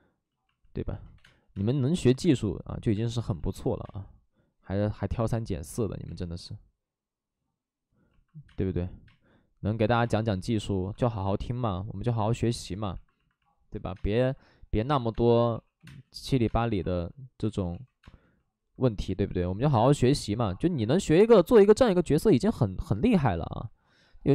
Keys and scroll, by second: 1.1 2, 1.2 space, 3.2 ctrl+z, 3.8 space, 6.0 3, 8.4 space, 9.0 space, 10.0 space, 10.9 space, 11.1 ctrl+z, 13.9 space, 15.1 space, 15.5 2, 15.7 2, 15.8 space, 17.7 ctrl+z, 18.0 space, 22.3 ctrl+z.